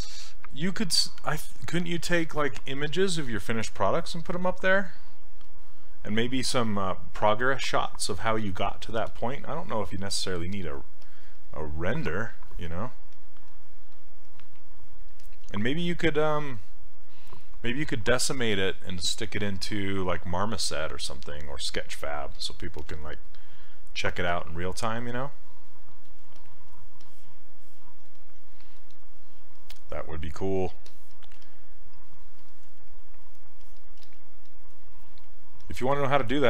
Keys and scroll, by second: 31.4 s, 34.0 s.